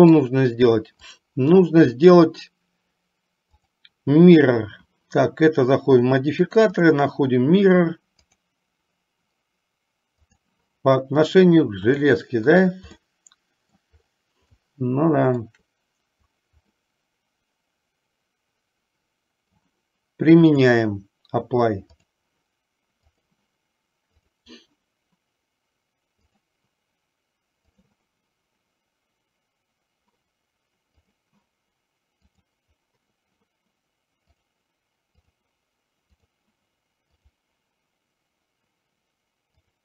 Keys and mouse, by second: 3.6-5.1 drag, 7.1-8.7 drag, 10.5 click, 13.2-14.1 middle drag, 14.8-15.7 shift+middle drag, 17.1-19.8 middle drag, 20.8-22.4 drag, 23.2 click, 24.5-26.7 drag, 27.8 click, 31.1 click, 34.5-35.6 drag, 36.3 click, 37.5-39.8 drag.